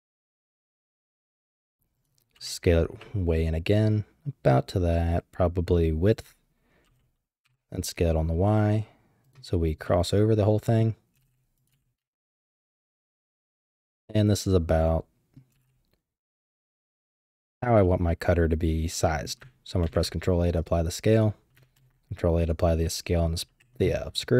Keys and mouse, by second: 0.3 z, 1.0 shift+middle click, 1.5 g, 2.3 s, 6.8 s, 9.9-10.8 middle drag, 11.1 g, 11.7 z, 12.1 shift+middle click, 12.8-14.6 drag, 14.1 middle click, 14.6 middle click, 15.5 g, 17.8 drag, 18.0-19.2 middle drag, 19.8 ctrl+a, 20.5 typing, 21.7 ctrl+a, 22.5 typing.